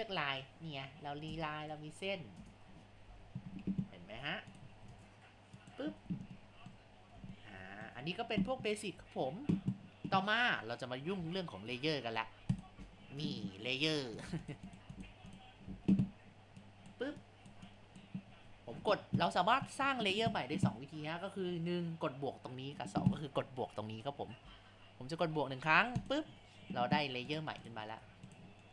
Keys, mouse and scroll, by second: 0.5-1.9 drag, 3.1 ctrl+z, 3.6 ctrl+z, 4.1 Tab, 4.9 shift+space, 6.4 shift+middle click, 6.9 scroll down 2, 7.3-10.6 shift+middle drag, 12.5 click, 14.2 click, 14.4 click, 14.7 click, 15.0 click, 15.3 click, 16.6 click, 17.7-20.7 drag, 26.0-27.4 drag, 27.6 click, 28.0 Tab.